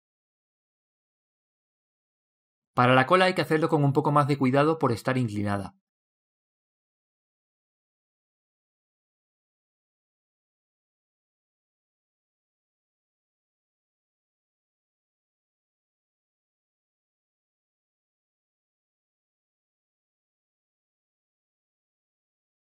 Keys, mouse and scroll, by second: 1.1 KP_3, 1.2 click, 3.1-4.9 drag, 7.4 l, 9.1-10.9 middle drag, 20.3 click.